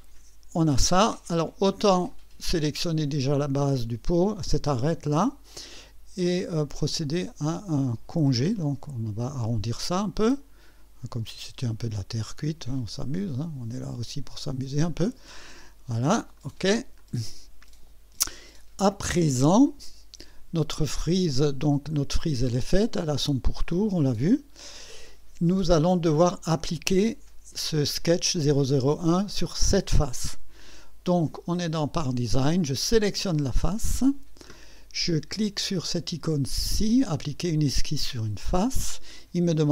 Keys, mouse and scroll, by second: 2.1 click, 8.4 click, 10.2 scroll up 1, 11.3 click, 13.6 scroll up 1, 14.8 scroll up 1, 16.4 click, 17.0-19.6 drag, 21.4 click, 21.9 click, 24.1 Escape, 33.0 click, 38.2 click.